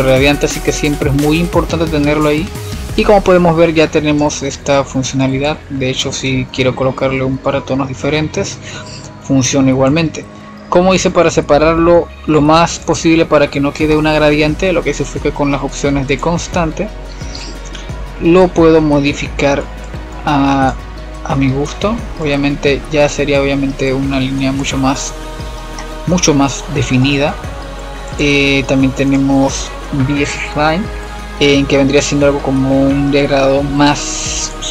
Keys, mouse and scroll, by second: 0.9-3.9 drag, 4.7-9.2 drag, 10.9-13.4 drag, 13.4 scroll up 3, 13.7-14.8 middle drag, 14.8-17.9 drag, 19.7-23.5 drag, 23.5-24.2 scroll down 1, 24.2-25.2 scroll down 1, 25.2-25.7 scroll up 1, 25.7-27.1 middle drag, 27.1-28.0 scroll down 4, 28.0 scroll down 1, 28.1-31.0 drag, 33.1-34.7 drag.